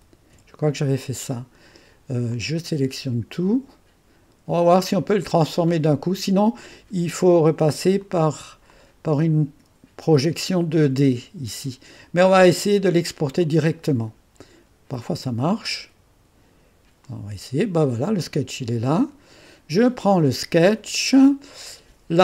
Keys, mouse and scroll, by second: 0.0 shift+b, 2.3-3.7 drag, 4.0-5.3 drag, 8.0 click, 8.8 click, 9.4 click, 13.4 click, 17.0 click, 19.0 click.